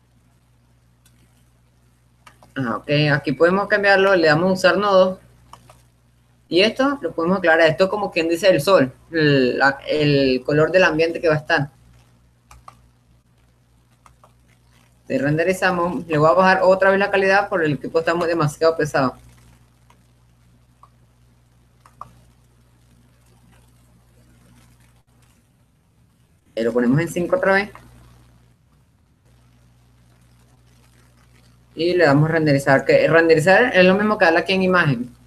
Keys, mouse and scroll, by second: 0.0 click, 2.9-8.0 drag, 11.0-12.5 drag, 16.5-18.1 drag, 19.8-22.1 drag, 22.1 middle click, 22.5-24.5 drag, 29.0-30.3 drag.